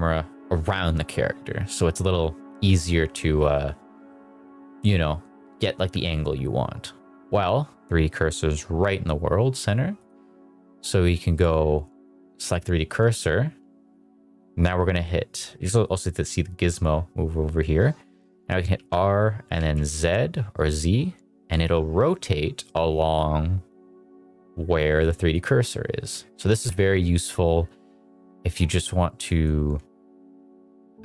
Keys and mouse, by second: 9.9-12.4 drag, 18.6 r, 19.4 z, 25.2 click, 26.2 r, 26.7 z, 29.3 click.